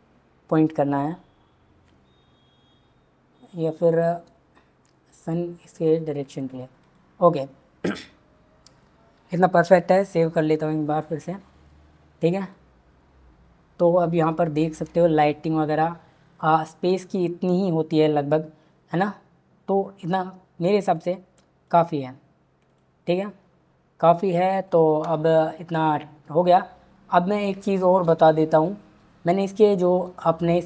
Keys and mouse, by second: 3.9 r, 6.9-7.4 drag, 9.3 ctrl+s, 10.2 click, 28.0 space.